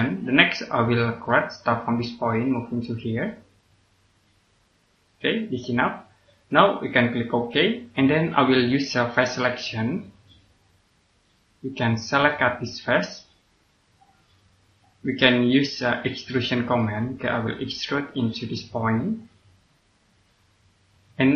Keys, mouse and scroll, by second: 0.4 scroll up 1, 1.5 click, 5.7 scroll down 1, 7.4 click, 11.0 click, 16.7 click.